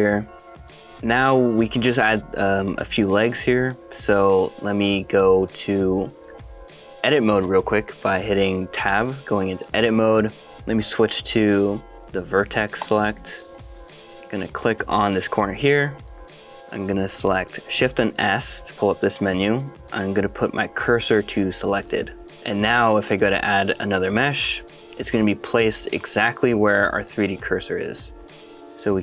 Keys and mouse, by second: 3.8 middle click, 4.4 shift+middle click, 5.6 shift+middle click, 6.4 middle click, 9.0 Tab, 12.8 click, 13.7 shift+middle click, 14.1 middle click, 16.2 middle click, 18.2 shift+s, 24.7-26.0 drag, 27.1-28.3 middle drag, 28.5 middle click.